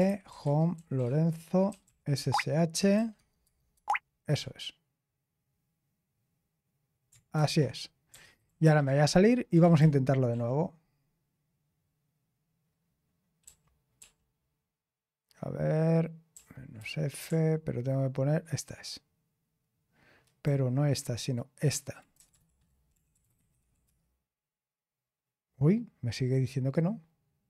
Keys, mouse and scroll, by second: 0.0-1.0 typing, 2.9-4.2 typing, 7.3 ctrl+c, 7.8-9.1 typing, 9.6 ctrl+p, 9.8 ctrl+p, 10.3 ctrl+p, 13.4 ctrl+p, 21.1 Left, 21.2-22.3 Left, 22.1-23.6 typing.